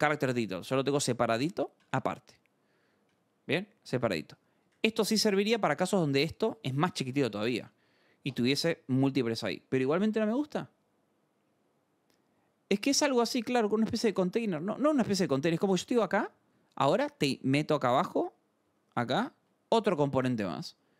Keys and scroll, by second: 0.5 scroll up 2, 1.0 k, 1.8 j, 1.9 Return, 5.0-7.6 typing, 5.3 Return, 7.2 Escape, 13.6-20.9 typing, 14.0 Return, 17.8 Escape.